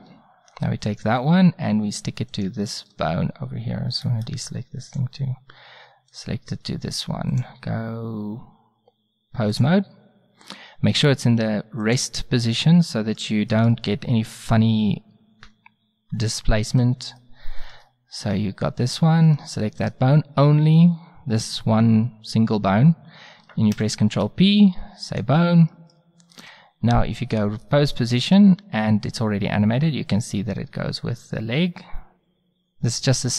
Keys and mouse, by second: 4.1 middle drag, 4.9-6.9 drag, 6.1 right click, 7.3-8.0 drag, 7.3-7.8 right drag, 8.7-9.2 drag, 11.9-15.2 middle drag, 17.3 drag, 22.5 middle click, 23.8 ctrl+p, 26.4 a, 28.2 middle click, 29.1 click, 29.3 middle click, 29.5 click, 30.1-31.0 drag.